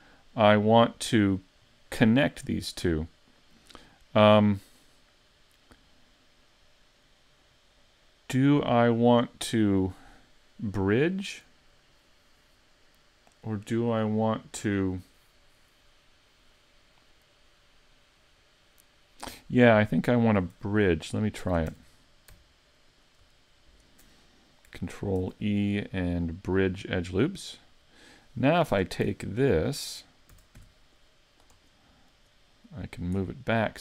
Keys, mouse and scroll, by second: 2.5 middle click, 21.4 ctrl+Tab, 22.9 alt+right click, 23.7 alt+shift+right click, 25.2 ctrl+e, 27.4-28.1 scroll down 3, 28.1 middle click, 28.7 ctrl+Tab, 30.3 a, 30.6 c, 31.6 right click, 32.7 middle click.